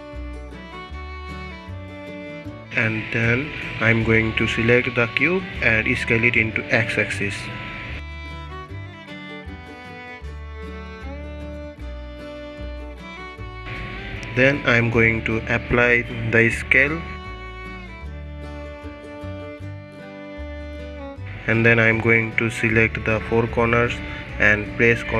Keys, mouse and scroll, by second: 0.7-1.6 middle drag, 1.6 scroll up 1, 2.4 KP_1, 4.0 scroll up 1, 4.6 s, 11.2-12.2 middle drag, 12.2-12.8 scroll up 2, 12.8 middle click, 13.1 Tab, 14.3 middle click, 14.9 Tab, 15.5 ctrl+a, 16.8 ctrl+a, 17.9-19.2 drag, 19.7 drag, 20.0-20.3 middle drag, 20.3 click, 20.5 Tab, 21.5 2, 22.0 click, 22.8 shift+click, 23.8 shift+click, 24.3-25.1 middle drag.